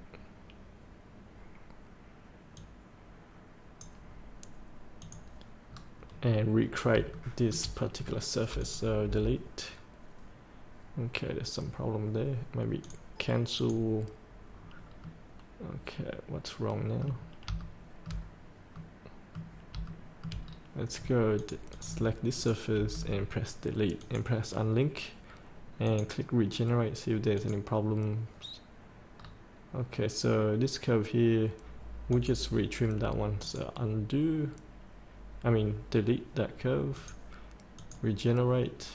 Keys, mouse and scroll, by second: 0.3 scroll up 1, 2.6-4.3 drag, 5.7 scroll up 1, 7.1 shift+middle click, 7.7 scroll up 1, 8.6 click, 9.0 Delete, 12.8 click, 14.5 scroll up 1, 15.0-17.4 middle drag, 17.6 shift+middle click, 18.4 scroll up 1, 18.7 middle click, 19.8 shift+middle click, 20.4-20.9 scroll down 2, 21.4 click, 22.7 Delete, 24.0 click, 29.1 scroll down 1, 31.0 scroll down 1, 32.1 click.